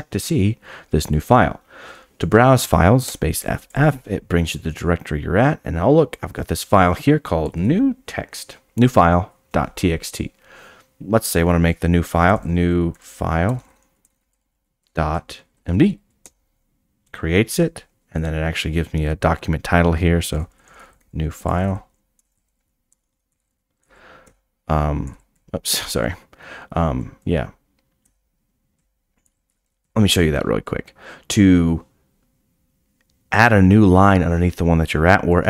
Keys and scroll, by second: 16.4-17.1 typing, 21.4 Return, 21.4-23.1 typing, 24.2 o, 29.5 d.